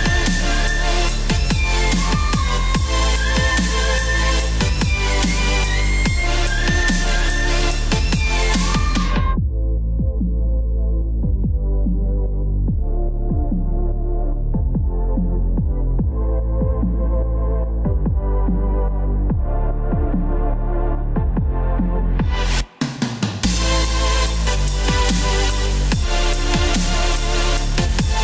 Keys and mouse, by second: 1.5 KP_3, 3.0 KP_Decimal, 3.0 KP_2, 3.3 KP_6, 3.5 KP_2, 5.7 Return, 7.9 KP_8, 8.8 KP_2, 11.5 click, 11.6-13.6 typing, 11.8 Return, 11.9 click, 13.8 KP_Subtract, 14.0 KP_Subtract, 14.1 right click, 14.3 right click, 14.6 click, 14.7 KP_0, 14.9 Return, 14.9 click, 15.1 Return, 15.4 click, 15.5 Return, 15.5 KP_0, 17.0-24.4 typing, 17.7 click, 18.5 Return, 19.8 click, 20.0 Return, 25.4 KP_5, 27.1 click, 27.3 KP_Subtract, 27.4-28.2 typing, 27.5 Return.